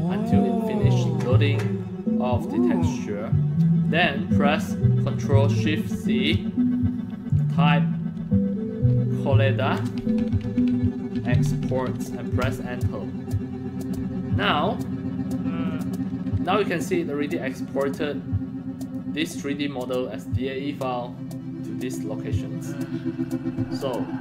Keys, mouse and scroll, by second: 2.9-3.8 middle drag, 5.9 ctrl+shift+c, 7.2 click, 8.9-12.1 typing, 12.3 Return, 17.7-18.8 drag.